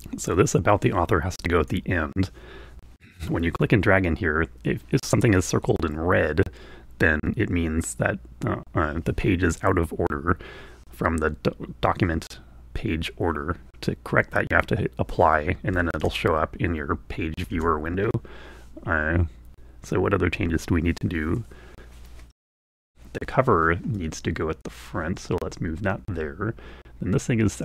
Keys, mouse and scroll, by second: 0.6-2.2 drag, 16.2 alt+Tab, 17.7 alt+Tab, 24.2-25.3 drag.